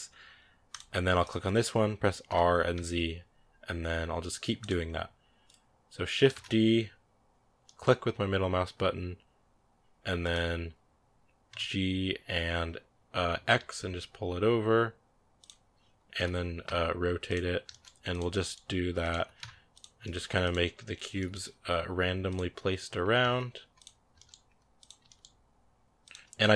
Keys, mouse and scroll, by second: 1.1 right click, 2.1 r, 5.3 right click, 6.2 shift+d, 11.3 g, 16.0 r, 17.5 shift+d, 18.2 g, 19.0 r, 19.8 g, 20.8 right click, 20.9 g, 22.8 r, 23.9 shift+d, 24.8 g, 26.4 scroll up 4.